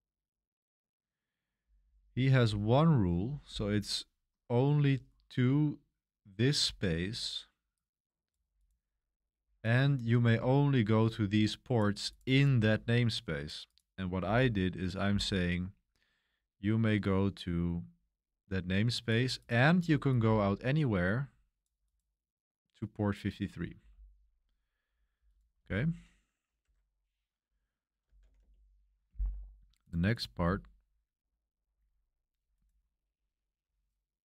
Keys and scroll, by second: 26.6 Escape, 27.8-28.7 typing.